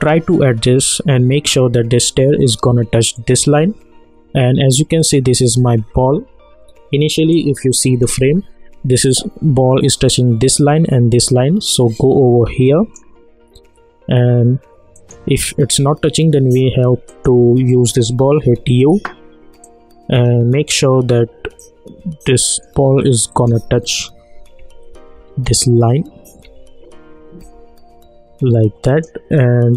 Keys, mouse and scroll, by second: 3.1 click, 7.3-10.4 drag, 11.9-14.9 drag, 17.2 click, 18.4 u, 19.6-23.3 drag, 24.6 Right, 27.4 Left, 28.9 click.